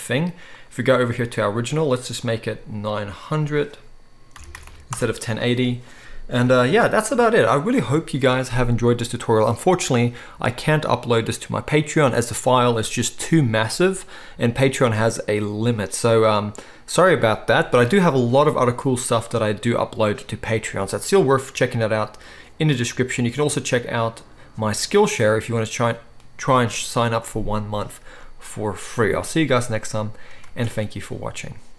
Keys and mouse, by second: 1.8-3.1 drag, 4.6 0, 6.7 ctrl+s, 7.2-30.6 shift+middle drag, 30.6 ctrl+s.